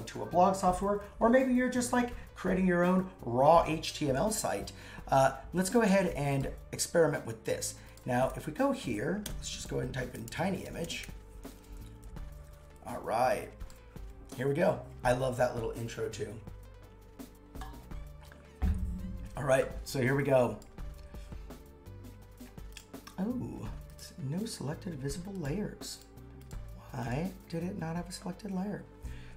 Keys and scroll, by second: 5.2 alt+Caps_Lock, 9.2 super+/, 9.9-11.5 typing, 11.6 Return.